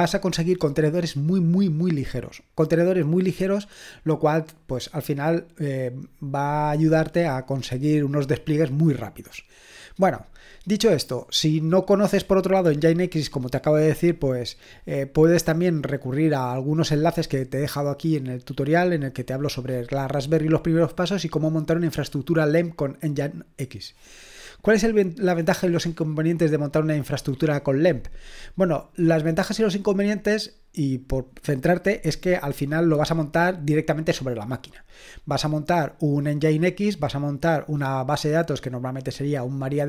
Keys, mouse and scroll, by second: 15.5-17.9 scroll down 1, 17.9-23.2 scroll down 1, 23.2-39.8 scroll down 1.